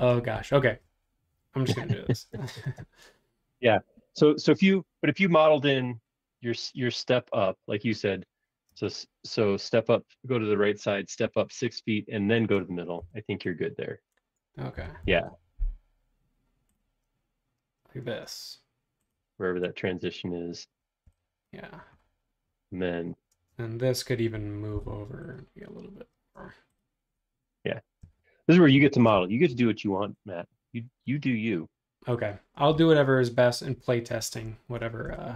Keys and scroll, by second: 2.0 l, 8.7 space, 13.0 l, 14.5-15.5 typing, 19.6 space, 21.0 e, 23.3 space, 24.8 m, 28.5-30.0 typing.